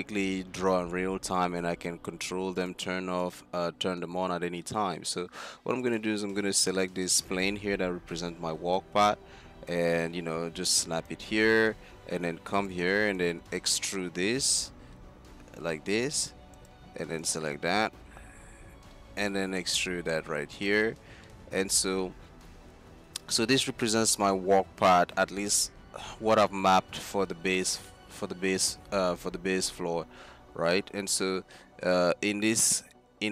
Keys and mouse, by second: 5.9-8.0 drag, 7.7-8.0 typing, 10.6-11.8 drag, 11.8 Tab, 12.2 z, 13.4-15.0 drag, 13.4 z, 14.5 e, 17.5 z, 18.8 e, 20.8 z, 26.1-27.9 drag, 29.3 Tab, 29.9 z, 30.3 z.